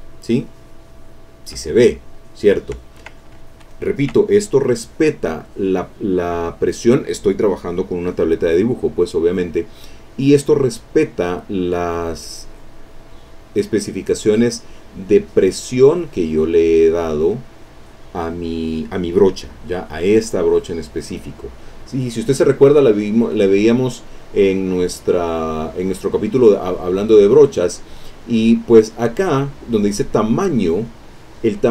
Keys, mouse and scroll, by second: 8.8 click, 9.6-12.0 middle drag, 12.0-13.4 drag, 14.9-16.3 drag, 17.2 click, 20.6 click, 22.7 click, 24.5 click, 25.5 click, 29.3 click.